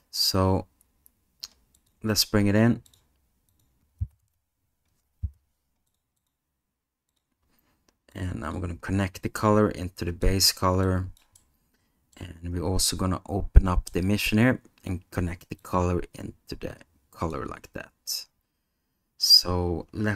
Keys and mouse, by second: 1.8 click, 8.1 click, 9.2-10.2 drag, 10.8 click, 11.5 middle click, 13.9 click, 15.6-17.3 drag.